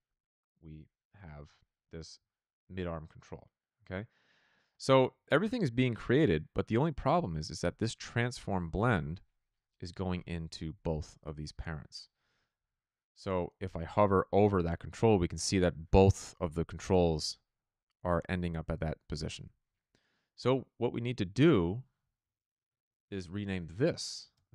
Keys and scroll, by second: 22.7 ctrl+c, 23.5 ctrl+v, 24.2-24.5 typing.